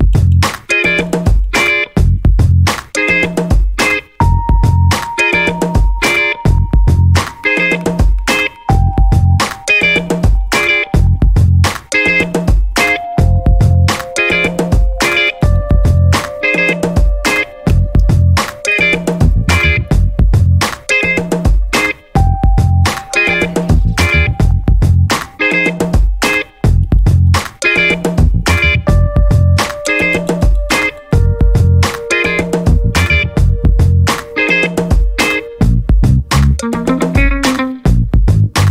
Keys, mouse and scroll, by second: 2.4 0, 3.1-3.4 scroll down 2, 3.9-4.5 scroll up 2, 4.7 scroll down 1, 5.5 click, 7.0 click, 7.9 click, 9.4 click, 10.3-11.3 typing, 11.9 click, 12.7 scroll down 1, 13.7 scroll up 2, 14.3-16.3 drag, 17.7 click, 18.1 middle click, 19.3 click, 20.4 click, 22.9 click, 25.3 click, 26.6 click, 27.8 click, 28.8 middle click, 30.0 click, 31.0 click, 32.4 click, 33.4 click, 33.9 click, 34.6 click, 36.1 click, 36.4 click.